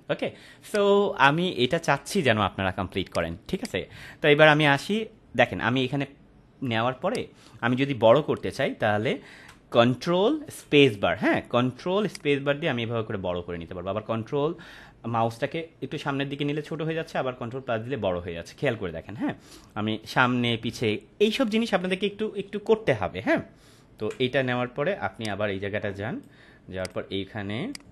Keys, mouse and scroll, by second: 0.6 click, 3.3 space, 3.5 click, 3.8-4.8 space, 7.0 click, 8.5 space, 10.6 ctrl+space, 12.4-24.0 ctrl+space, 25.1-26.4 drag.